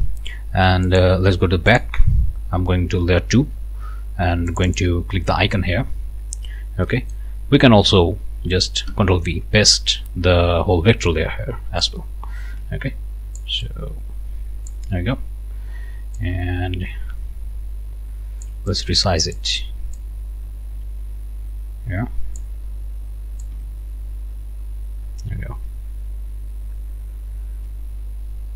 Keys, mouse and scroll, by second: 0.9 click, 1.7 click, 4.5 click, 6.3 scroll down 1, 6.9 click, 8.9 ctrl+v, 11.8-13.6 drag, 13.6-14.9 ctrl+shift+drag, 16.2-19.6 ctrl+shift+drag, 20.0-22.6 drag, 23.4-28.5 ctrl+shift+drag.